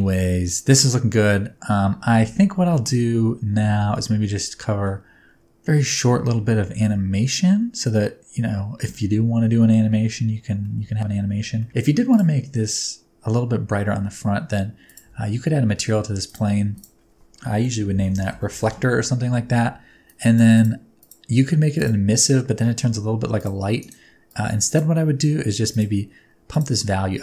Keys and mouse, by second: 3.9-4.8 middle drag, 10.5 middle click, 11.6 middle drag, 14.9 click, 16.3 click, 16.9-19.1 drag, 20.1 click, 21.0 click, 21.8 click.